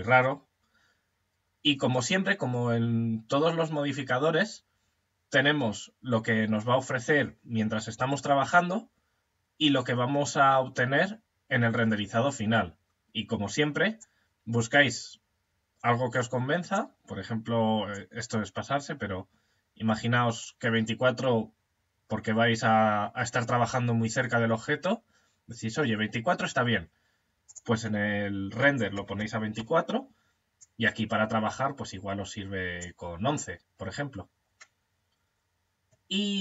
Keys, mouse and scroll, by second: 13.4 click, 17.3 click, 26.9 click, 30.0 click.